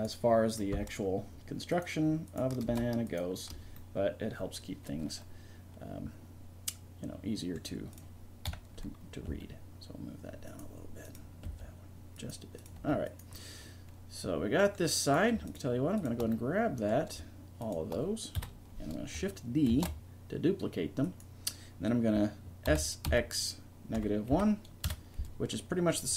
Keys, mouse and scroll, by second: 0.6 right click, 0.8-3.1 middle drag, 3.8-5.9 middle drag, 7.9 right click, 8.5 KP_3, 9.3 g, 11.5 g, 12.8 g, 13.4 right click, 14.0 right click, 16.4-18.1 right drag, 18.4 KP_1, 19.7 shift+d, 22.7 s.